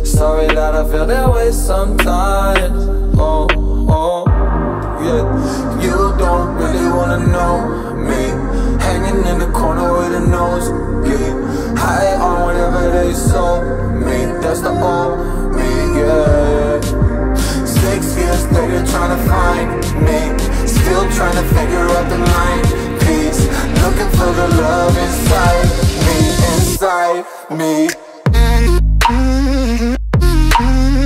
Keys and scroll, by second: 3.5 Return, 26.7 Down, 30.9 Up.